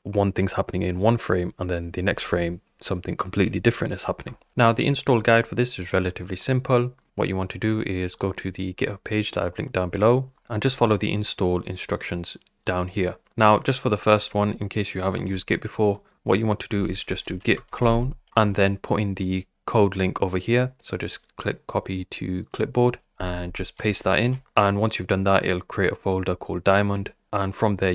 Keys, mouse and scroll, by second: 4.2 Up.